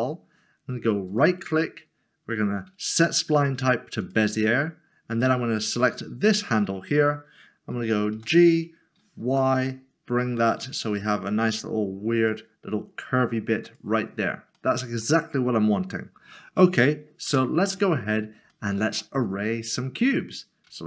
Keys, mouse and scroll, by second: 4.0 click, 8.1 g, 12.2 click, 14.8 middle click, 17.3 Tab, 18.5 shift+middle click.